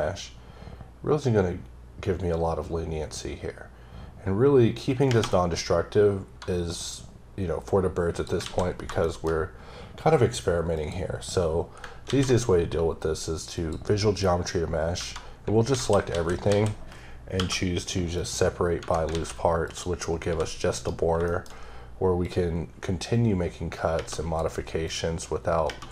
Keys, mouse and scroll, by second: 8.7 scroll down 2, 9.0 shift+middle click, 9.3-10.7 scroll up 1, 10.7 click, 12.1 ctrl+a, 13.5 click, 15.0 Tab, 18.1 click, 19.6 click, 20.3 g, 20.7 right click, 21.2-22.2 shift+scroll up 2, 21.3 shift+middle click, 22.2 click, 24.9 click.